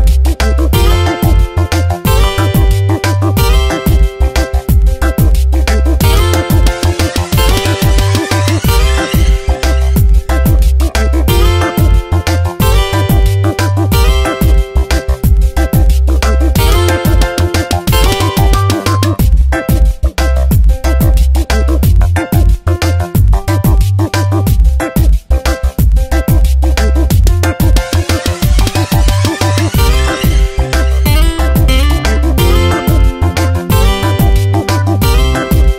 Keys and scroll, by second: 1.4 space, 2.3 ctrl+t, 3.4 Return, 5.9 ctrl+t, 8.3 Return, 10.1 ctrl+t, 15.0 Return, 17.2 Up, 17.7 Down, 22.4 s, 24.0 v, 25.0 Tab, 27.1 Up, 27.3 Left, 27.9 Down, 29.3 ctrl+t, 31.8 Return, 33.4 shift+Down, 33.8 Up, 34.4 Down, 35.0 ctrl+t.